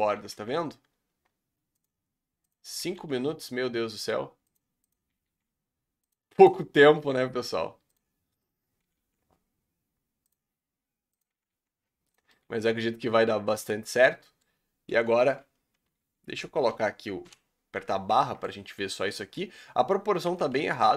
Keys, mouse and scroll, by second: 0.2 g, 2.5 click, 2.9 g, 4.9 click, 5.2 g, 6.4 click, 6.9 g, 8.5 click, 8.9 g, 11.2 click, 11.4 g, 12.3-13.5 middle drag, 14.7 middle click, 14.9 KP_1, 16.3 Tab, 17.2 KP_Divide, 17.7 Tab, 18.2 shift+middle click, 18.4-19.1 scroll up 5, 19.1 shift+middle click, 19.4-20.3 scroll up 1, 20.3 l.